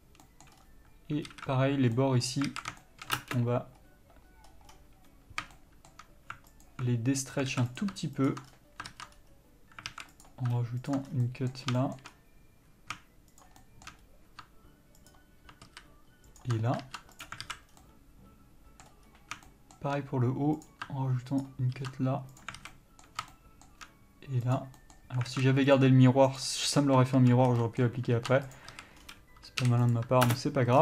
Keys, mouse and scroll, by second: 1.5 alt+a, 2.1 middle click, 2.7 alt+a, 3.4 ctrl+space, 3.4-6.9 middle drag, 4.0-4.9 scroll up 1, 4.9-5.7 scroll down 1, 6.9 alt+click, 7.7 alt+a, 7.9 click, 8.7-9.1 scroll down 1, 9.1 ctrl+z, 9.4 scroll up 1, 9.5-10.1 scroll down 1, 10.1 alt+a, 10.4-11.1 drag, 11.3 scroll down 2, 11.4-13.6 middle drag, 12.3-13.1 scroll up 1, 13.6 shift+click, 13.8-15.3 shift+middle drag, 14.2-15.3 scroll up 1, 15.3 ctrl+click, 15.9 ctrl+z, 16.6 ctrl+click, 16.8-17.4 scroll down 1, 17.4 ctrl+e, 17.6 alt+a, 17.9 scroll down 1, 18.0-20.8 middle drag, 19.3-19.7 scroll up 1, 20.8 click, 21.6 ctrl+click, 22.6 ctrl+e, 22.8 alt+a, 22.9-24.6 middle drag, 24.6 click, 25.0 middle click, 25.5 alt+a, 25.9-26.6 drag, 28.0 b, 28.7 ctrl+e, 28.9 a, 29.2 scroll down 1, 30.1 u, 30.5 ctrl+space.